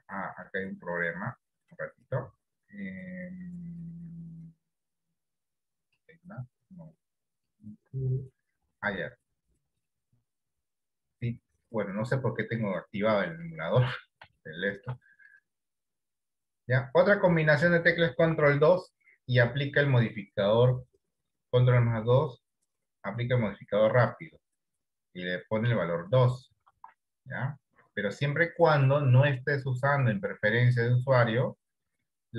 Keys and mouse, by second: 1.1-2.3 drag, 14.4 shift+middle click, 18.6 ctrl+2, 26.8 ctrl+z, 29.3-30.7 drag.